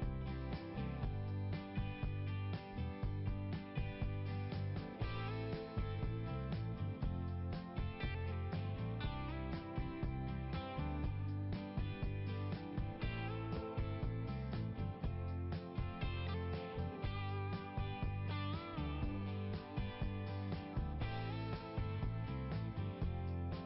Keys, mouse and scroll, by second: 0.5 click, 1.7 click, 4.2 click, 5.4 click, 7.3 click, 9.3 click, 12.7 click, 13.4 right click, 15.3 click, 15.9 scroll down 1, 22.7 right click.